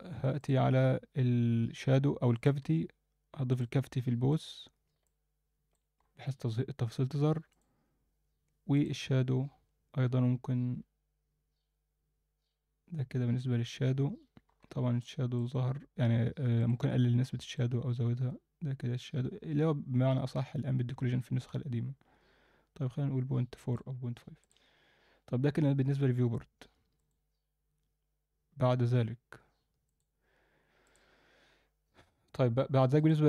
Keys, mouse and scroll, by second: 0.4-4.9 drag, 5.0 alt+middle click, 5.9-7.5 scroll up 1, 7.5-13.5 drag, 14.5-14.9 scroll up 2, 15.0-15.4 alt+shift+middle drag, 15.5-16.6 scroll down 2, 16.6-23.8 drag, 24.4 click, 25.5-25.9 scroll down 2, 27.0-32.1 drag, 33.0 click.